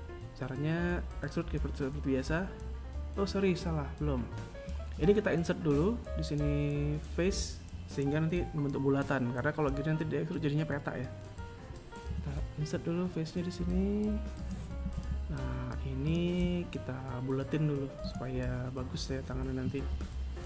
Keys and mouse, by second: 3.2 right click, 13.2 ctrl+Tab, 16.3 right click, 18.2 g, 19.8 right click, 20.1 g.